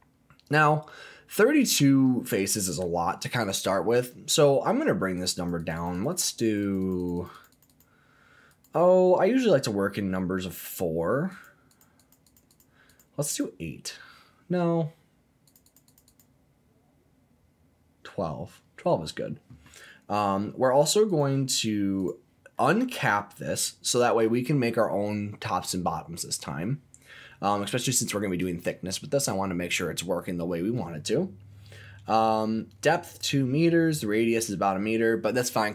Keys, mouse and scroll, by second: 0.9 middle click, 2.0-2.4 scroll up 2, 2.4 middle click, 5.1 click, 5.3 click, 5.6 click, 5.7 click, 5.9 click, 6.1 click, 6.2 click, 6.4 click, 6.6 click, 6.8 click, 7.0 click, 7.1 click, 7.3 click, 7.5 click, 7.7 click, 8.5 click, 9.2 click, 11.3 click, 11.7 click, 12.0 click, 12.3 click, 12.5 click, 12.9 click, 13.3 click, 14.0 scroll down 1, 15.4 click, 15.6 click, 15.9 click, 16.1 click, 21.0-22.0 drag, 22.5-24.2 middle drag.